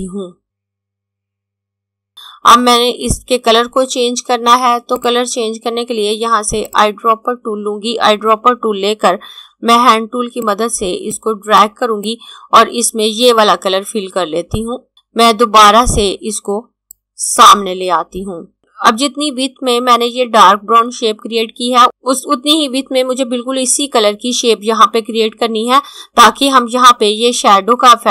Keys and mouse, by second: 5.0 click, 9.6-12.0 typing, 10.3 click, 11.2 click, 14.1 typing, 16.8 click.